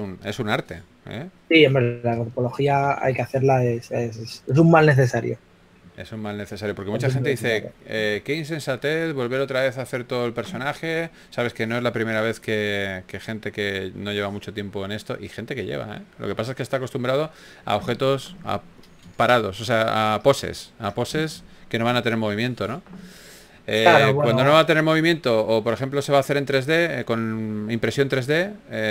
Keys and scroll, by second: 0.0-0.7 typing, 6.1 shift+f, 7.2 s, 8.4 shift+f, 10.6 typing, 12.0 shift+f, 20.8 s, 21.4 shift+f, 23.0 s, 25.1-28.3 typing.